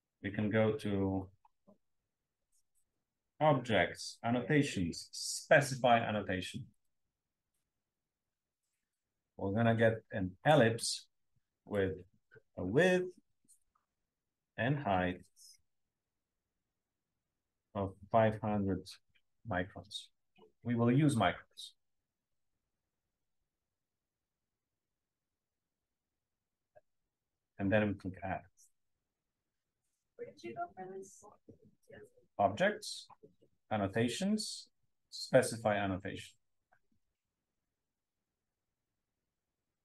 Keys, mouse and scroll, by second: 1.1-2.3 scroll up 1, 2.3-3.7 scroll up 1, 3.7-7.3 scroll up 1, 7.3 scroll up 1, 8.8 click, 10.3 click, 11.7 click, 13.5 click, 14.2 click, 14.6 5, 15.8 BackSpace, 16.2 0, 16.9 click, 17.9 5, 18.3 0, 27.1 click.